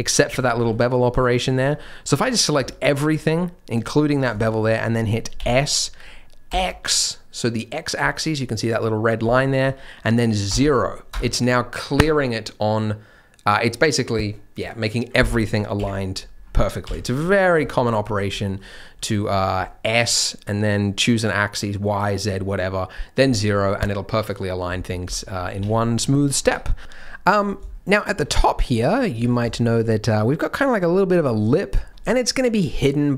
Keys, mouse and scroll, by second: 0.2 shift+middle click, 0.6 b, 1.6-2.1 scroll up 4, 2.1-2.5 scroll down 2, 2.6 shift+middle click, 2.8-3.6 scroll up 8, 4.0-4.4 scroll down 2, 4.4 shift+middle click, 5.7 s, 15.7 KP_1, 16.8 KP_3, 17.3 scroll down 3, 17.6 shift+middle click, 17.7-18.9 scroll up 8, 18.3 middle click, 18.9 middle click, 19.2-20.6 scroll down 1, 20.6-21.3 scroll down 3, 25.0 KP_3, 25.6 Tab, 25.8-26.8 scroll up 3, 26.1 middle click, 26.4 Tab, 26.8 scroll down 1, 27.1 middle click, 27.3-27.7 scroll down 3, 27.7 shift+middle click, 28.3 middle click, 28.7-29.1 scroll up 3, 29.1 Tab, 29.1 middle click, 29.5 shift+middle click, 29.8 middle click, 31.5 scroll down 1.